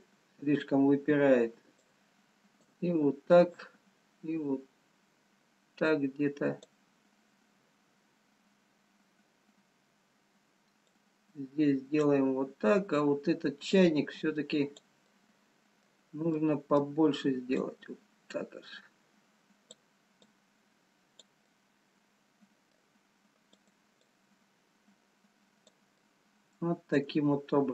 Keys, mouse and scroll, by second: 0.8 middle click, 1.4-1.7 scroll down 1, 2.1 click, 3.8 click, 11.1 click, 12.4-13.2 scroll down 3, 13.7 click, 16.5 middle click, 18.5 click, 20.4 click, 21.5 middle click, 23.8 click, 24.1 click, 26.1 middle click.